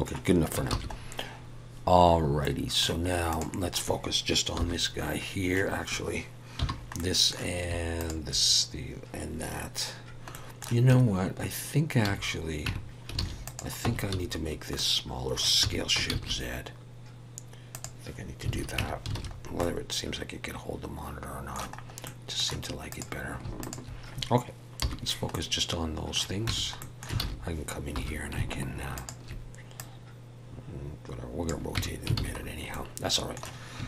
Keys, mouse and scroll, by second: 1.5 ctrl+s, 1.5-2.4 scroll up 1, 2.4 middle click, 3.3 click, 4.6 /, 6.6 /, 7.0 middle click, 8.0 shift+click, 10.3 middle click, 10.9 Tab, 12.0 a, 12.7 Tab, 13.2 alt+a, 13.4 click, 13.8 Tab, 14.1 a, 14.7 middle click, 15.6 s, 18.5 alt+a, 18.8 Tab, 19.2 alt+a, 19.4 scroll down 2, 19.6 middle click, 21.8 scroll up 2, 22.0 middle click, 22.9 click, 23.6 shift+click, 24.8 /, 25.3 middle click, 26.5 Tab, 26.8 middle click, 27.2 alt+a, 27.9 2, 28.9 alt+shift+click, 29.8 click, 31.8 Tab, 32.2 alt+a, 32.4-32.8 scroll down 3, 32.7 middle click.